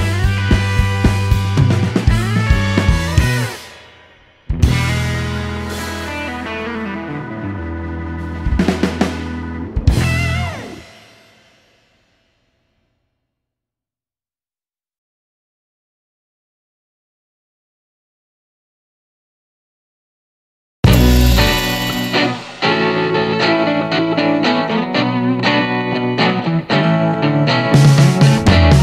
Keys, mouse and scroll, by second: 0.3 shift+middle click, 0.8-1.3 shift+scroll up 3, 2.1 click, 2.9 shift+click, 3.3 shift+o, 4.7 click, 5.9 shift+click, 6.1 shift+o, 6.5-7.3 shift+middle drag, 8.5 click, 9.7 click, 11.3 click, 12.5 shift+click, 12.9 shift+o, 14.4 click, 16.1 click, 17.5 click, 18.6 click, 19.2 shift+o, 19.7 shift+middle click, 19.9-20.6 shift+scroll down 3, 20.6 click, 21.0-21.3 scroll up 1, 22.9 click, 24.5 shift+click, 24.9 shift+o, 26.8 click, 27.9 click, 28.4 shift+o.